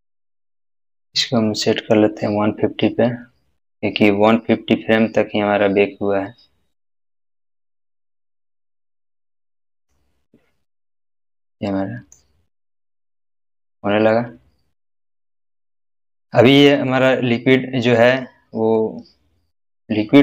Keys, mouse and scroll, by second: 1.9 middle click, 1.9-10.0 drag, 11.6-12.2 middle drag, 17.3-18.0 scroll up 1, 18.0-18.7 scroll down 1, 18.7-19.7 middle drag.